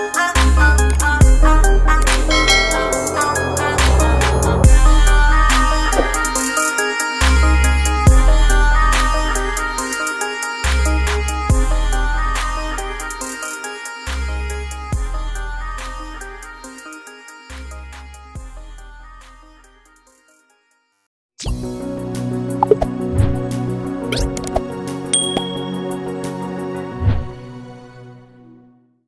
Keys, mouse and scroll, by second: 1.7 ctrl+=, 2.3 ctrl+=, 14.1 ctrl+-, 14.4 ctrl+-, 14.7 ctrl+-, 16.2 ctrl+=.